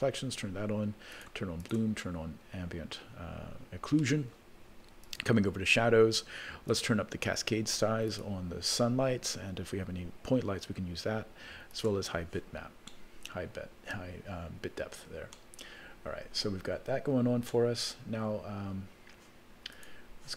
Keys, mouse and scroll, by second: 1.2 click, 1.6 click, 5.0 click, 6.7-8.3 drag, 11.7 click, 12.9-14.0 middle drag, 15.0-15.5 scroll down 2, 15.3-16.3 middle drag, 16.6-17.0 scroll up 2, 17.5 middle click, 19.7 click.